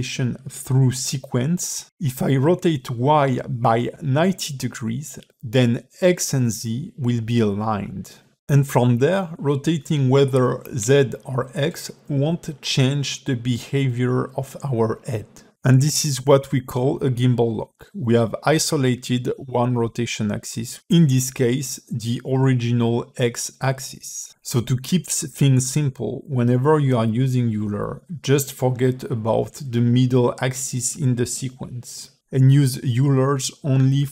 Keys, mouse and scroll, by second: 1.8 click, 2.9 click, 5.2 a, 5.5 alt+r, 6.1 a, 6.3 a, 6.8 middle click, 7.1 click, 8.2 click, 10.4 click, 12.5 click, 13.6 click, 15.8 click, 17.2 click, 20.2 middle click, 21.2 a, 22.0 alt+r, 22.8 middle click, 23.7 a, 23.8 a, 24.9 click, 26.8 click, 28.4 middle click, 29.3 h, 30.2 click, 31.7 click, 33.6 click.